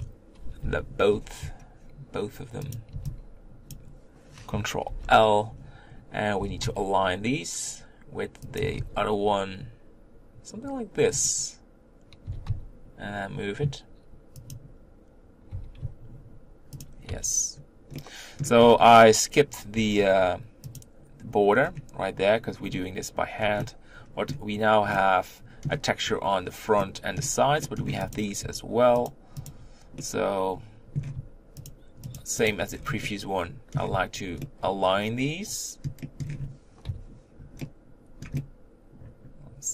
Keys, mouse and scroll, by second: 0.4 ctrl+l, 2.8 click, 2.9 b, 4.8 ctrl+l, 6.4 g, 8.6 s, 12.3 g, 15.5 g, 17.1 Tab, 17.5-17.9 scroll down 1, 17.9 middle click, 18.6-19.7 scroll up 5, 19.7 Tab, 20.8 click, 21.6-22.6 scroll down 1, 22.6-23.4 scroll up 2, 23.4 scroll down 1, 23.6-28.2 middle drag, 28.2 click, 29.0 shift+click, 29.5 shift+click, 30.0 middle click, 31.0-31.7 scroll up 1, 31.7 shift+click, 32.3 shift+click, 32.7-33.0 scroll down 4, 33.0 middle click, 33.9 z, 34.5-36.8 middle drag, 36.8 KP_5, 37.6-39.7 middle drag.